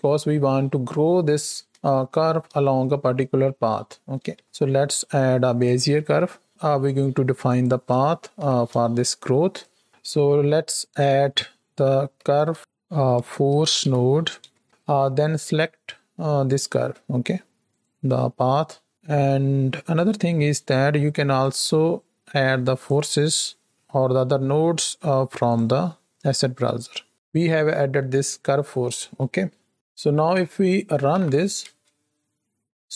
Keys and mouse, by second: 2.0 shift+middle click, 4.2 shift+a, 6.5 g, 8.4 shift+Left, 9.5 right click, 9.9 alt+a, 10.9-14.6 drag, 16.4 click, 19.9 click, 21.4-22.8 drag, 25.4 click, 31.1 shift+Right, 31.1 shift+Left, 31.6 space.